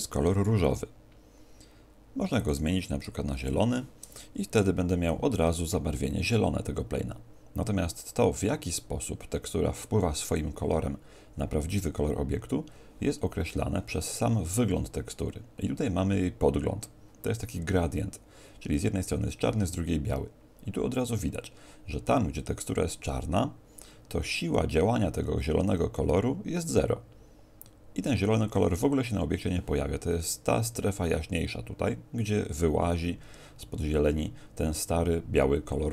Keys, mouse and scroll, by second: 2.3 click.